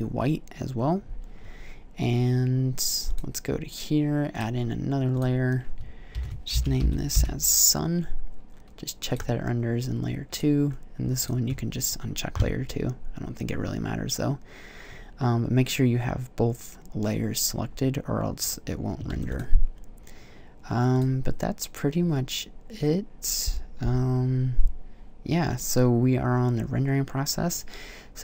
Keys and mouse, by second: 2.9-6.9 drag, 8.9-12.9 drag, 18.5 click, 18.9 ctrl+s, 20.8-22.1 drag.